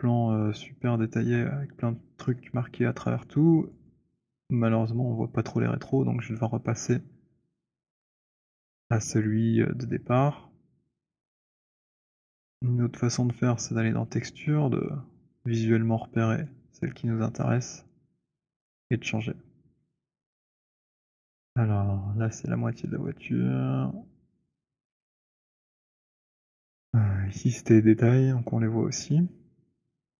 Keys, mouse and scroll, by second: 1.3 click, 3.6 alt+click, 4.6 alt+click, 5.7 click, 11.7 click, 13.3 click, 16.7 click, 22.9 click, 24.7 click, 25.8 click.